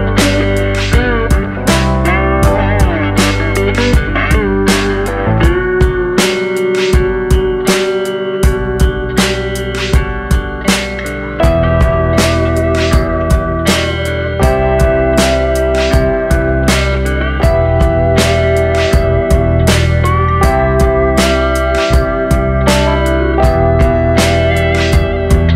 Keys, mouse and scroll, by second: 0.7 click, 2.3 click, 9.2-9.5 scroll down 3, 9.5 middle click, 11.1 Tab, 11.9 Tab, 12.8 middle click, 14.0-14.4 scroll up 1, 14.5 shift+middle click, 15.1-15.6 scroll up 1, 15.6 scroll down 1, 16.2 middle click, 18.0 ctrl+r, 22.0 middle click.